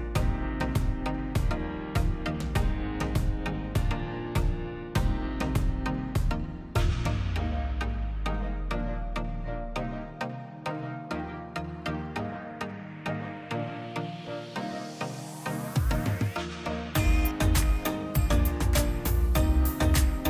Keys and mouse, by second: 0.5 shift+d, 1.4-2.4 middle drag, 2.4 drag, 3.6 drag, 4.7 drag, 5.9 ctrl+shift+click, 6.2-7.7 drag, 8.1 ctrl+shift+click, 9.6 middle click, 10.5-13.2 middle drag, 13.2-14.7 drag, 15.5 ctrl+shift+click, 16.3 ctrl+shift+click, 18.7 ctrl+shift+click, 19.2 ctrl+shift+click.